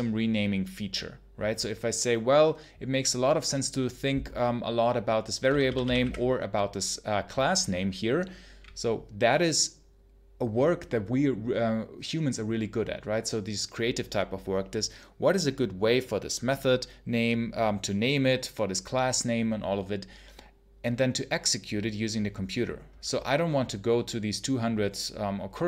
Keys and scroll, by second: 5.3 k, 5.9 b.